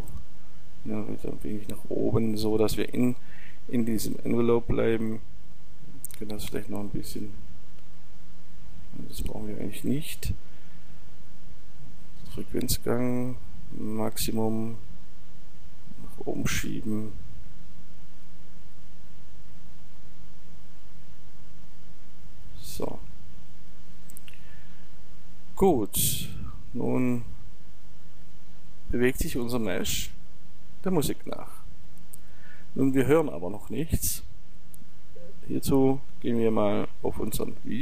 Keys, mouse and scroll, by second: 12.9-24.9 drag, 26.5-28.2 drag, 31.4-37.8 drag.